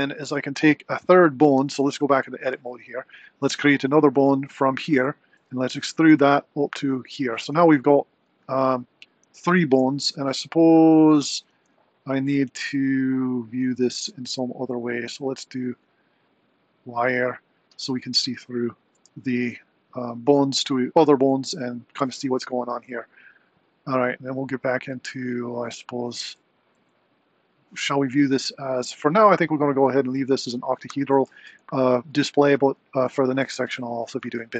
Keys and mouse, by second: 1.6 Tab, 2.6 click, 5.4 e, 11.6 Tab, 13.3-14.0 drag, 15.8-16.9 drag, 32.0 Tab, 33.7 click.